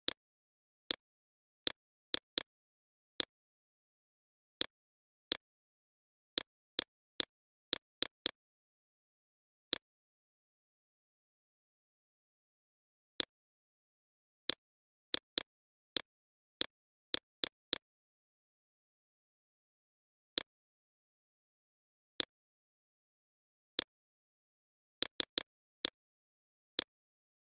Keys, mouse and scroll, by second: 3.4 right click, 3.9-12.5 drag, 13.6 right click, 14.0-16.7 drag, 20.4 right click, 21.1 click, 23.0 right click, 23.4 click, 24.2 BackSpace, 24.6 click.